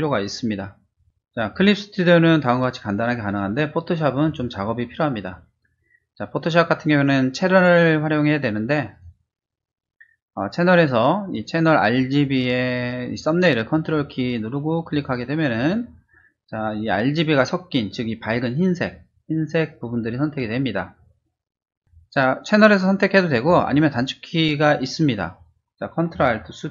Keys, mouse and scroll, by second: 4.2 click, 8.9 click, 14.9 ctrl+click, 21.8 ctrl+d, 23.4 click.